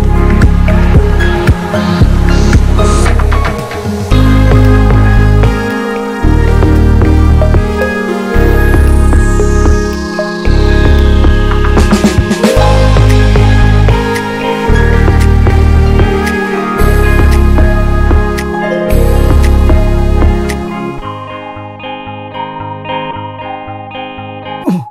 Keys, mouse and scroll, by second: 0.5 scroll down 1, 0.7-2.8 drag, 2.8-3.6 scroll up 1, 3.6 scroll down 1, 3.7 click, 5.1 click, 6.0 middle click, 6.5-7.6 drag, 7.6 middle click, 7.9 click, 8.7-9.7 middle drag, 9.7-11.5 drag, 11.5-13.1 ctrl+shift+right drag, 13.1-14.5 drag, 14.5-15.0 scroll up 2, 15.0-17.3 drag, 17.3 middle click, 17.6-20.8 drag, 20.9 middle click, 21.2 click, 22.0 middle click, 22.3-24.9 ctrl+shift+drag.